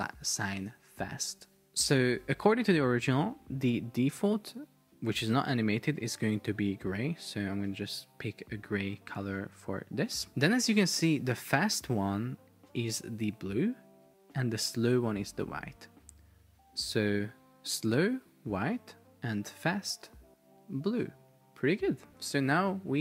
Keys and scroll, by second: 1.5 super+Tab, 2.1 super+Tab, 3.2 super+Tab, 10.3 space, 15.5 super+Tab, 22.7 super+p.